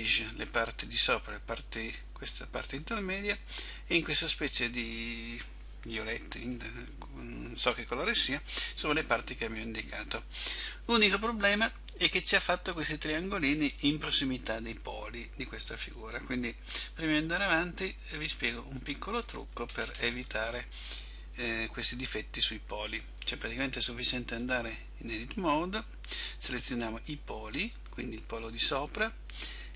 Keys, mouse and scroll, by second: 18.1 middle click, 19.7-20.2 scroll up 4, 21.5 middle click, 24.5 a, 27.9 b.